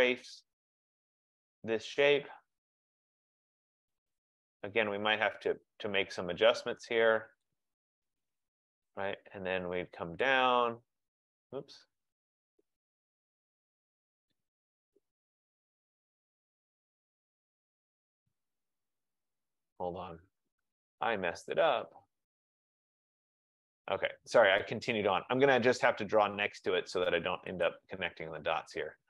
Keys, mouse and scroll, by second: 0.0 click, 4.2 click, 7.5 click, 10.4 click, 15.3 click, 16.0 click, 17.5 click, 19.5 ctrl+z, 20.3 ctrl+z, 22.5 ctrl+z, 23.9 click, 27.8 click.